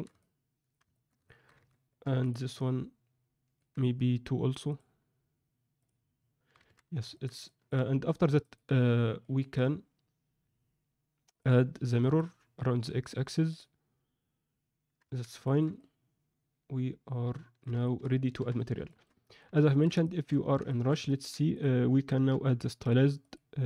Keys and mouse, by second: 0.1 middle click, 0.9 ctrl+middle click, 1.2 alt+shift+middle click, 2.0 Tab, 2.5-3.5 middle drag, 4.7 drag, 5.8 click, 6.6 alt+a, 7.1 ctrl+middle drag, 7.4 middle drag, 8.0 click, 8.4 middle click, 9.2 alt+middle click, 12.2-13.5 drag, 15.3 ctrl+alt+a, 15.4 ctrl+middle click, 15.7-17.6 middle drag, 17.8 shift+middle click, 18.3 n, 18.8 alt+shift+middle drag, 19.2 middle click, 19.6 ctrl+alt+middle drag, 20.0 shift+middle drag, 20.6 middle click, 21.0 middle click, 22.2 n, 23.2-23.6 drag.